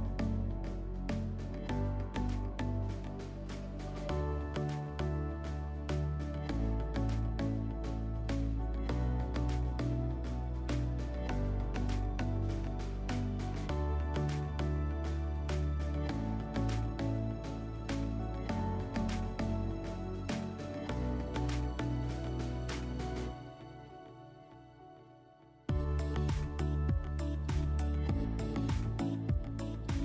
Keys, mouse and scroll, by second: 0.3 click, 1.5 ctrl+click, 2.6 click, 3.5 click, 9.7 click, 13.2 click, 15.3-16.8 middle drag, 15.9 alt+w, 17.7 click, 19.0 alt+w, 20.3 scroll, 20.4 w, 22.8 click, 25.7 click, 26.1 alt+w, 27.6 right click.